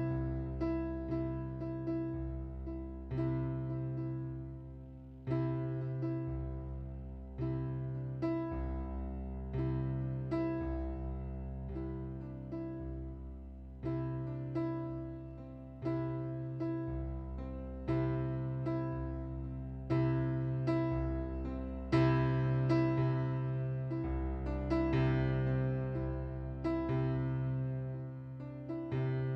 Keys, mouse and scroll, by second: 1.9 click, 2.6 click, 3.8 click, 4.6 click, 5.4 click, 8.2 right click, 8.8 middle click, 9.8 click, 11.6 ctrl+d, 12.7 click, 13.9 right click, 15.3 click, 16.6 click, 19.9 click, 20.7 click, 22.2 middle click, 23.2 click, 25.0 middle click, 26.6 click, 28.7 click.